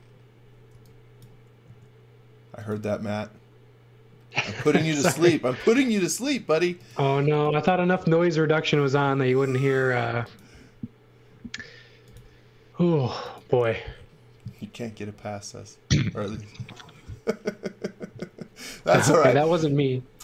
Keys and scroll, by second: 0.7 e, 1.6 a, 7.3 e, 9.0 a.